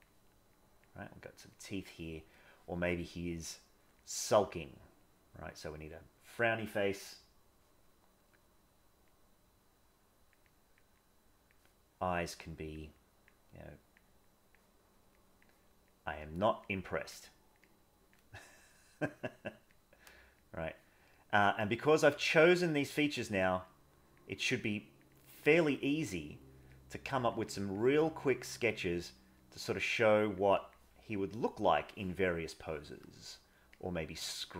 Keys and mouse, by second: 0.6 click, 1.1 click, 1.5 click, 2.5 middle click, 3.5 click, 4.1 click, 5.1-7.0 drag, 9.0-10.3 drag, 10.5 click, 11.0 click, 12.2 click, 12.9 click, 13.6 click, 14.3 click, 15.2 click, 15.9 click, 16.3 click, 16.7 click, 17.2 click, 18.5 click, 19.4 click, 19.8 click, 20.4 click, 21.1 click, 22.0 click, 23.2 click, 23.6 click, 24.5 click, 25.2 click, 26.2 click, 26.9 click, 27.4 click, 28.2 click, 29.3 click, 29.9 click, 30.1 click, 30.5 click, 31.4 click, 32.6 middle click, 33.8-34.5 drag.